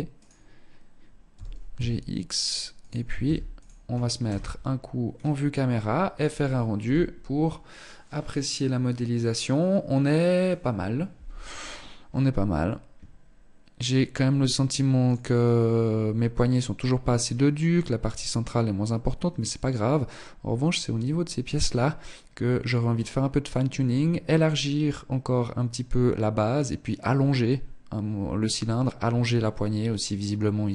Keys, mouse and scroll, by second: 0.4 g, 2.4 ctrl+s, 3.3 KP_0, 4.2-5.4 scroll down 3.